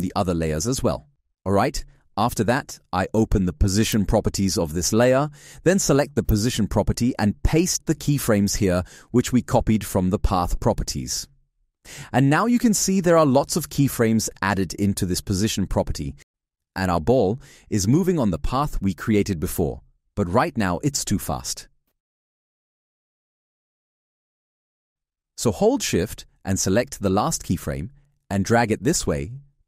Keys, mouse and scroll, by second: 8.3 ctrl+v, 27.9 alt+click.